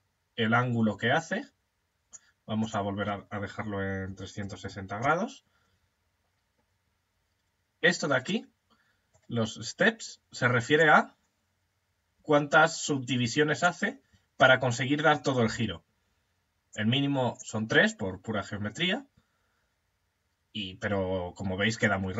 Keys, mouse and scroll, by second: 2.1 click, 8.0-10.2 middle drag, 10.2 click, 16.2 click, 21.3 click.